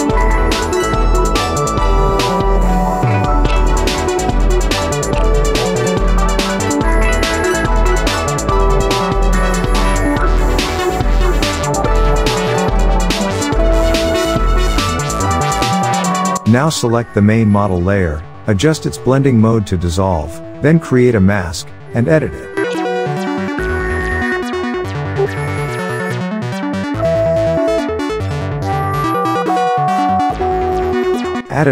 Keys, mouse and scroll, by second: 1.6 space, 1.7 click, 2.0 space, 2.5-3.2 click, 8.4-14.4 drag, 20.7 space, 20.8-21.1 click, 21.4 alt+right click, 22.0 click, 22.0-22.5 click, 31.0 click.